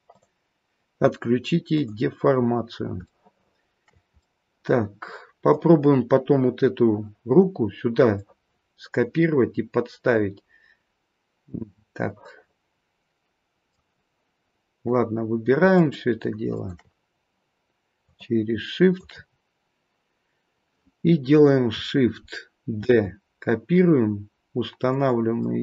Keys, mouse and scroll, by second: 0.1 click, 3.1 shift+middle click, 4.2 middle click, 8.1 middle click, 13.8-15.5 scroll down 1, 15.5 scroll down 2, 15.7 shift+click, 16.4 shift+click, 19.1 shift+click, 22.8 shift+d, 25.4 middle click.